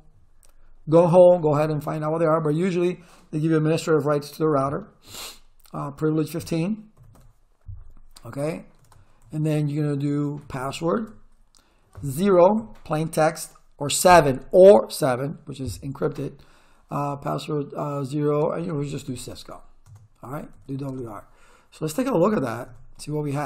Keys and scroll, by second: 6.7-7.7 typing, 8.8-11.2 typing, 12.6 0, 18.3-21.4 typing, 19.8 Return, 21.9 ctrl+z, 22.1 Return.